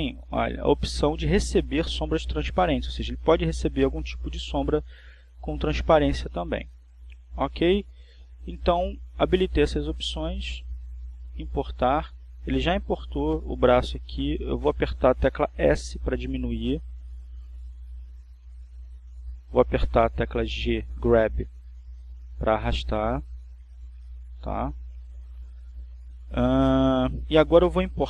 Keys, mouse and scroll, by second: 4.3 click, 11.8 click, 16.9 s, 19.9 click, 21.4 g, 25.0 click.